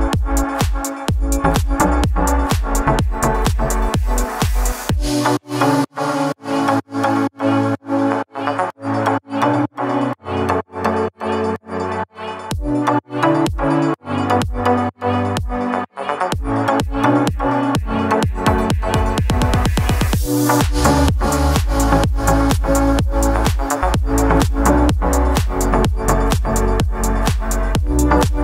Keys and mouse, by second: 0.1 Tab, 0.5-1.9 drag, 2.2 Tab, 2.5 shift+middle click, 3.6 shift+middle click, 3.9 click, 4.3 shift+middle click, 7.0 middle drag, 7.8-8.2 drag, 8.2 middle click, 8.5 shift+middle click, 8.7 middle click, 9.2 click, 10.2 middle click, 10.5 shift+middle drag, 12.7-13.4 drag, 14.1 click, 14.8 middle click, 16.0 middle click, 16.3 click, 16.7-18.0 drag, 18.1 shift+click, 18.7 middle drag, 19.6 shift+middle click, 20.9-21.4 drag, 21.8 shift+d, 22.7-23.8 drag, 24.3 middle drag, 25.5 Tab, 25.9 a, 26.0 a, 26.2 shift+n, 26.7 Tab, 27.7 shift+middle click.